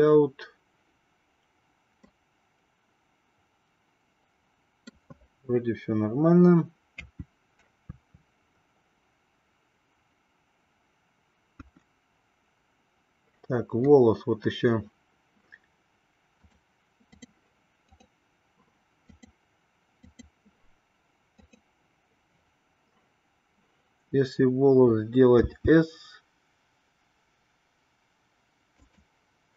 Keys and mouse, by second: 0.0 click, 2.1-5.1 middle drag, 6.8 KP_2, 8.0 KP_3, 11.5 KP_1, 16.5-17.5 drag, 17.8 click, 19.2-20.2 drag, 21.3 click, 25.3 s.